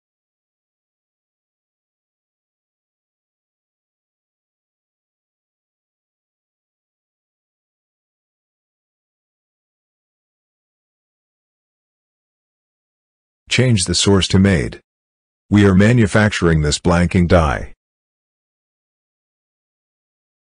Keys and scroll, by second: 3.3 ctrl+v.